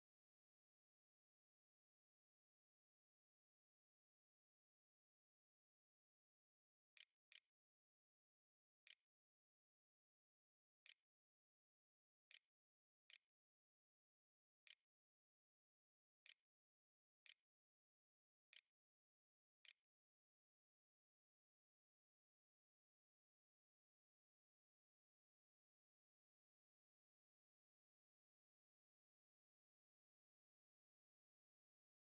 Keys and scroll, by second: 5.6-18.2 typing, 10.6 Tab, 14.5 Tab, 18.8 ctrl+a, 19.4 ctrl+s, 20.4 a.